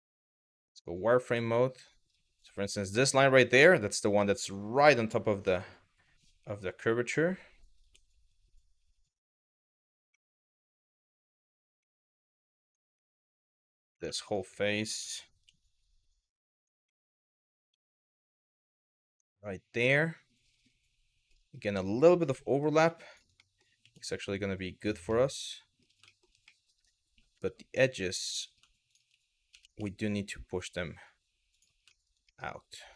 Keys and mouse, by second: 0.1-1.5 middle drag, 2.0 click, 2.6 middle click, 3.9 middle click, 5.0 g, 7.4 y, 9.5 click, 9.9-11.2 middle drag, 11.5 middle click, 12.3 click, 12.7 middle click, 13.7 3, 13.9 click, 14.6 g, 16.2 click, 16.6 middle click, 18.1-21.0 middle drag, 22.0 middle click, 23.1 middle click, 23.4 g, 24.4 click, 24.8 middle click, 25.8 middle click, 26.1 middle click, 27.0 2, 27.9 middle click, 28.5 click, 29.1 g, 31.1 click, 31.6 shift+middle click, 32.0-32.9 middle drag.